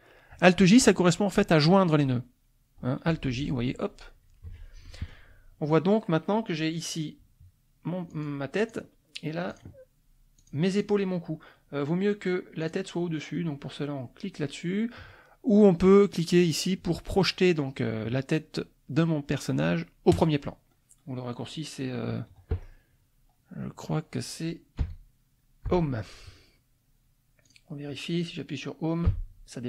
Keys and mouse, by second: 3.2 alt+j, 4.5 F1, 4.8 click, 6.9 click, 8.1 click, 8.6 click, 9.5 click, 10.4 click, 10.8 click, 12.6 click, 20.1 click, 24.8 Home, 25.7 Home, 27.4 click, 29.1 Page_Up.